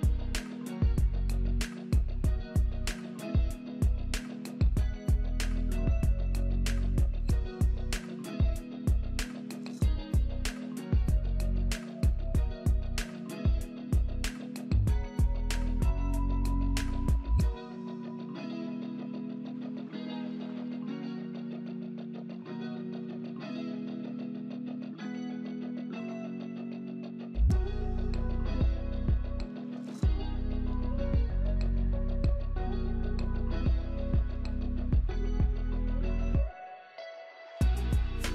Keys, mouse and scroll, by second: 4.5 double click, 4.8-5.9 typing, 7.6-8.6 typing, 9.7-11.0 typing, 27.4 double click, 28.0-29.1 typing, 31.8-33.2 typing, 32.5 double click.